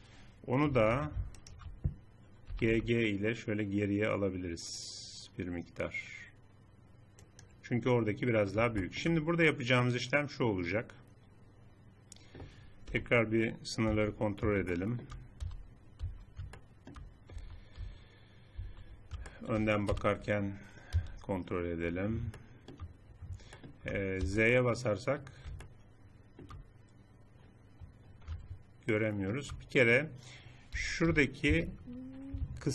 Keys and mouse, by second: 0.7 a, 2.5 g, 8.8 click, 9.0 middle click, 9.6 click, 12.8 KP_7, 13.8 z, 15.6 z, 16.0 z, 17.4 z, 17.8 z, 19.0 z, 19.8 KP_1, 21.0 z, 24.8 z, 28.3 click, 30.7 a, 31.0 a, 31.4 a.